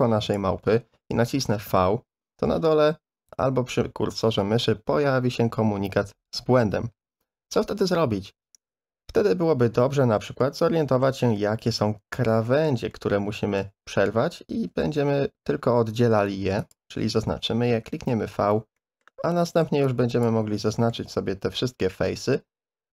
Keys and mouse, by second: 1.7 v, 3.3 v, 10.4 middle click, 11.4 shift+middle click, 12.5 shift+middle click, 12.9 middle click, 14.4 a, 14.6 a, 15.5 2, 16.6 alt+shift+click, 17.7 v, 18.8 middle click, 19.4 3, 19.6 c, 20.8 click, 22.1 middle click.